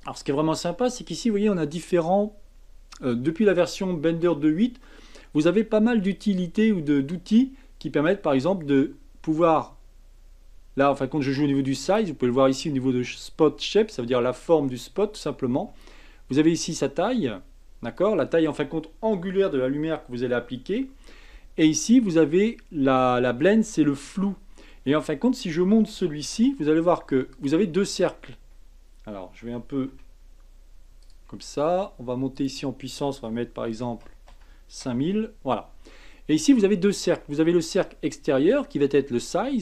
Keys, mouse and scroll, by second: 8.1 drag, 15.8-18.8 drag, 25.9 g, 27.7-28.3 middle drag, 28.3-29.4 scroll up 1, 29.4 g, 32.3-34.0 drag, 34.0 KP_0, 36.1-39.3 middle drag, 39.3-39.6 drag.